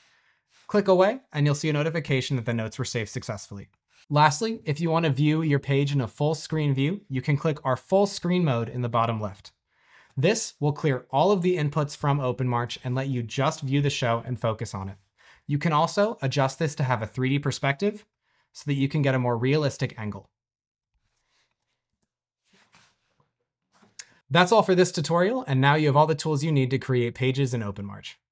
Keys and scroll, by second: 0.0-0.2 typing, 3.0-5.3 typing, 21.8-24.4 typing.